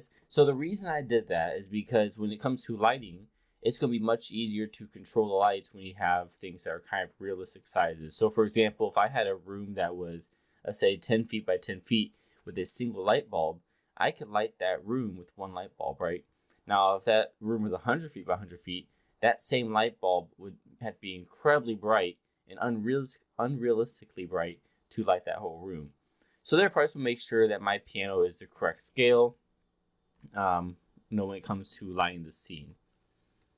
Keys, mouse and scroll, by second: 30.3-31.7 alt+drag, 33.0 click.